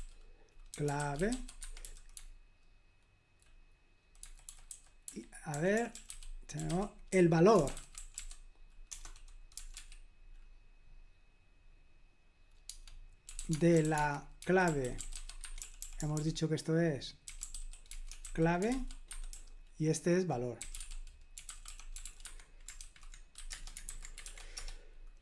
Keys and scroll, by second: 0.0-10.3 typing, 12.7-24.2 typing, 23.5 Return.